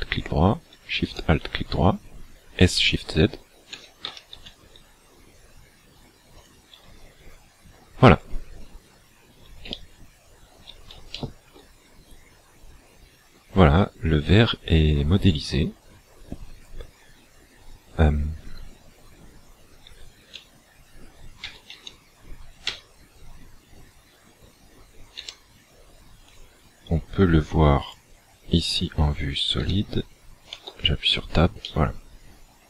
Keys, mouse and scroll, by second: 1.1 alt+shift+right click, 3.7 s, 6.4 shift+click, 8.1-9.1 scroll down 11, 9.7 shift+middle click, 11.1 shift+middle click, 20.2 z, 21.4 a, 21.7 a, 22.7 a, 25.2 a, 26.2 click, 29.6 a, 30.5 Tab, 31.7 middle click.